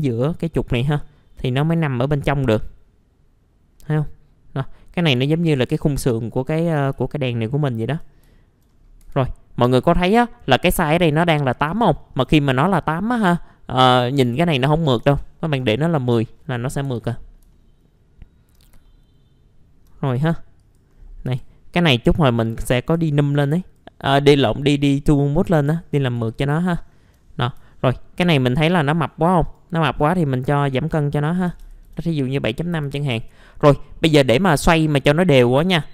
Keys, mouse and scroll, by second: 1.0-5.1 drag, 5.3 alt+middle click, 5.9 scroll down 1, 6.2 alt+middle click, 6.9 alt+middle click, 8.2 middle click, 8.7-10.7 scroll up 1, 10.7-12.5 drag, 15.0 KP_1, 15.1 KP_0, 16.4 middle click, 16.8 F4, 17.2 scroll down 1, 17.5 alt+middle click, 18.6 scroll down 1, 18.8 alt+middle click, 19.9-20.6 scroll up 1, 20.6 click, 21.1 scroll up 1, 21.2 F4, 22.4 click, 22.9 F4, 23.6 click, 25.5-25.9 scroll down 1, 25.9 middle click, 26.3 alt+middle click, 27.7 alt+middle click, 28.0 scroll up 1, 28.2 F4, 29.4 click, 31.2 KP_7, 31.5 KP_Decimal, 31.6 KP_5, 32.4 middle click, 32.4-32.8 scroll down 1, 32.9 alt+middle click.